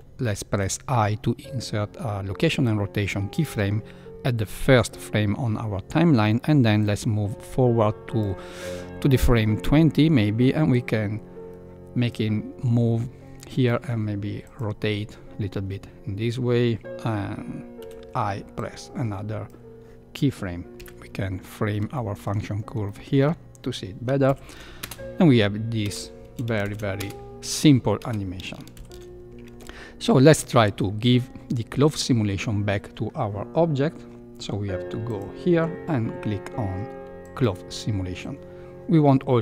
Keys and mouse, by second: 0.6 i, 6.7-8.2 drag, 10.7-12.1 drag, 13.7 r, 17.7 i, 20.7 KP_Decimal, 22.0 shift+middle click, 23.0 shift+middle click, 24.2 shift+Left, 24.8 space, 25.8 space, 26.6 shift+Left, 26.9 space, 28.0 space, 28.7 shift+Left, 35.0 click, 37.3 click.